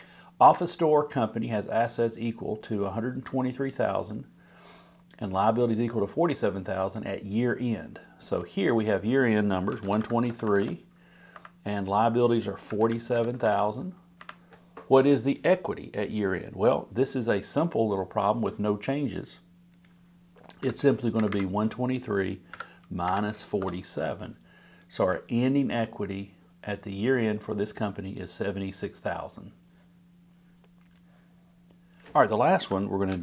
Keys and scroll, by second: 33.1 super+c.